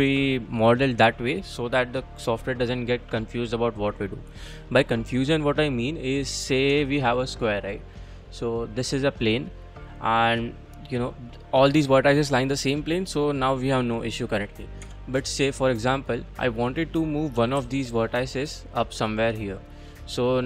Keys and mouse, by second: 6.7 Tab, 7.9 click, 8.8 click, 9.9-10.6 middle drag, 14.4 click, 14.8 Tab, 15.3 click, 17.4 g, 17.6 z, 19.7 click, 20.2 click.